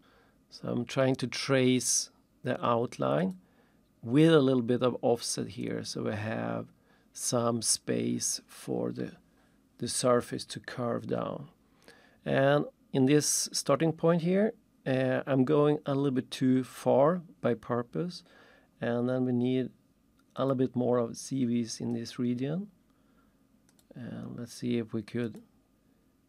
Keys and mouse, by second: 3.2 click, 20.4 click, 21.9 click, 23.7 click, 25.3 click.